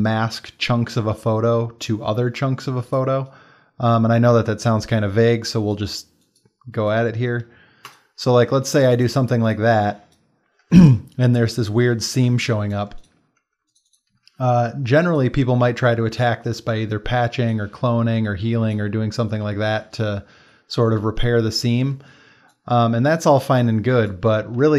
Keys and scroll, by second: 8.6 ctrl+space, 11.2 space, 12.3 space, 21.9 space, 24.6 space.